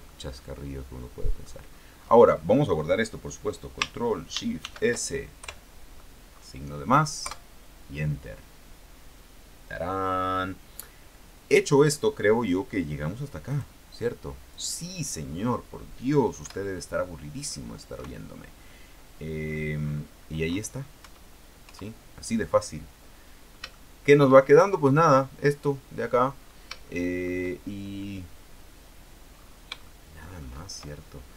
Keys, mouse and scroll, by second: 0.2-1.7 middle drag, 1.9 scroll down 2, 2.1 scroll up 2, 4.7 ctrl+shift+s, 5.5 KP_Add, 7.4 KP_Enter, 13.7 click, 14.7 click, 15.4-16.5 scroll down 1, 16.5 KP_1, 18.1 KP_6, 19.5-19.9 scroll down 1, 21.1 KP_1, 21.8 KP_3, 23.4 scroll down 1, 23.9 shift+middle click, 24.5-24.9 shift+scroll up 1, 24.9-26.5 scroll down 1, 26.5 scroll down 1, 27.0 shift+middle click, 29.5-30.0 scroll up 1, 30.0 shift+middle click.